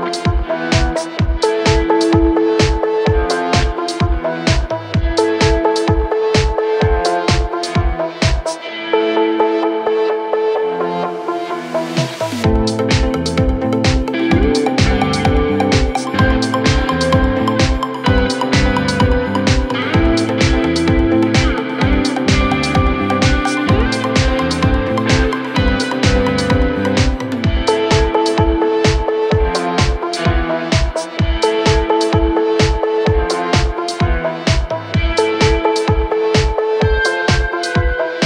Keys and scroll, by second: 6.7 g, 21.8 g, 33.1 F3, 33.5 Escape, 34.5 Delete, 36.2 shift+F2, 36.3 Escape.